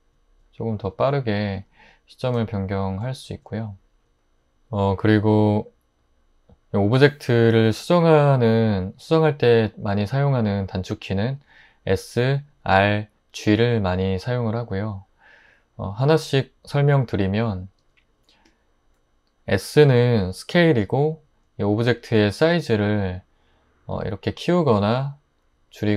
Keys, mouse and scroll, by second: 1.8-3.3 drag, 17.8-19.0 drag, 22.5 s.